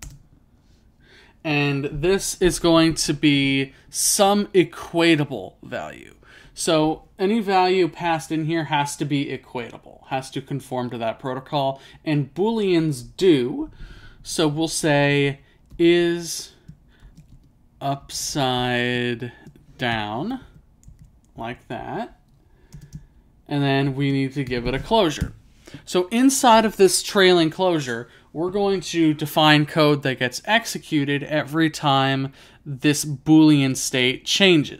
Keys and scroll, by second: 0.1 space, 15.8-16.9 typing, 21.5 ).